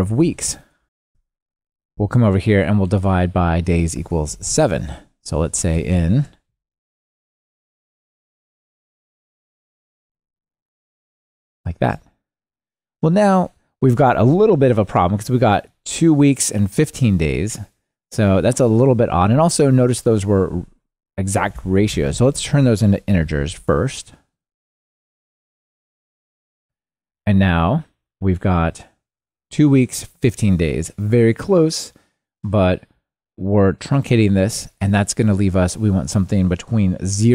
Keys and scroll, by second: 11.8 ctrl+r, 26.6 ctrl+r.